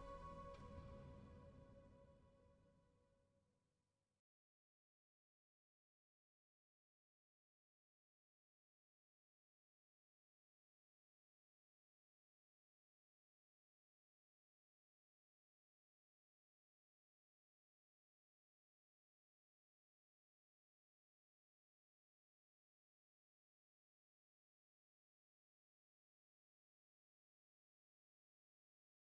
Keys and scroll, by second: 9.9 r, 11.7-12.2 typing, 19.8 space, 21.6 g, 25.5 9, 26.3 Return, 27.5 space, 28.2 m.